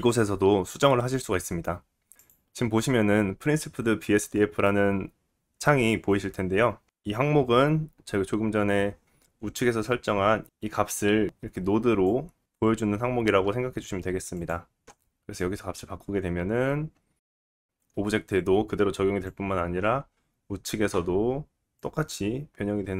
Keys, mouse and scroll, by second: 2.3-12.8 middle drag, 12.0 scroll down 2, 12.8-15.1 drag, 15.1-21.8 middle drag, 21.8-22.9 drag.